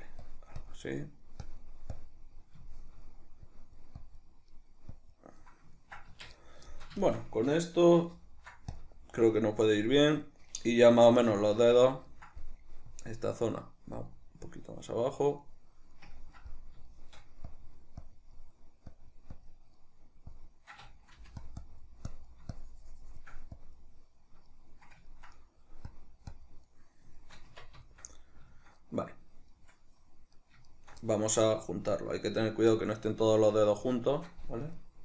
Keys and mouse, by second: 1.0 middle click, 1.4 click, 2.3-3.4 middle drag, 3.4-4.5 drag, 4.5 middle click, 4.9 click, 5.4-7.0 middle drag, 6.1 Tab, 7.0 shift+right click, 8.1 ctrl+shift+b, 9.4-12.9 middle drag, 11.5 Tab, 12.9-15.4 drag, 15.4-17.5 middle drag, 17.5 click, 18.3 middle click, 18.9 click, 19.8 middle click, 20.3 click, 21.1 f, 21.7-24.5 drag, 24.5-25.9 middle drag, 25.9 click, 26.7-30.4 middle drag, 27.5 Tab, 30.4 right click, 30.7 shift+right click, 31.1-34.6 middle drag, 34.6 right click.